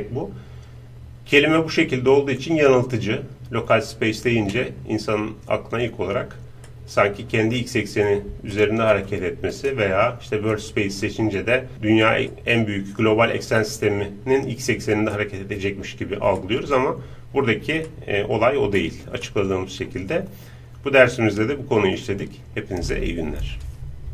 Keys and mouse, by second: 6.7-9.6 middle drag, 9.6-12.1 drag, 12.2-16.4 middle drag, 17.9-20.9 middle drag.